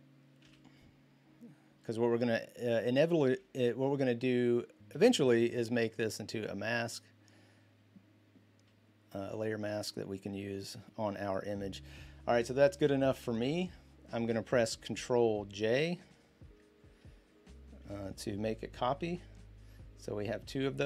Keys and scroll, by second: 0.2 b, 3.1 ctrl+z, 4.9-7.0 typing, 18.7 ctrl+j.